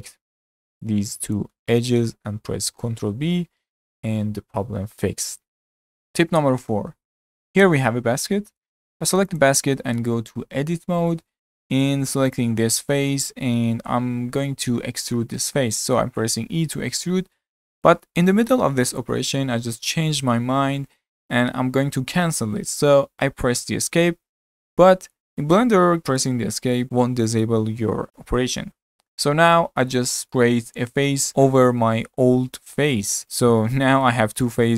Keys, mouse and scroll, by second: 0.5 2, 0.8 click, 1.3 shift+click, 1.7-2.7 middle drag, 2.7 ctrl+b, 7.4 middle click, 8.5-9.3 middle drag, 9.3 click, 10.0 Tab, 10.6 scroll up 4, 11.1-12.3 shift+middle drag, 12.3 click, 13.0-15.2 middle drag, 15.2 e, 29.9-31.6 middle drag, 32.7-34.7 ctrl+middle drag.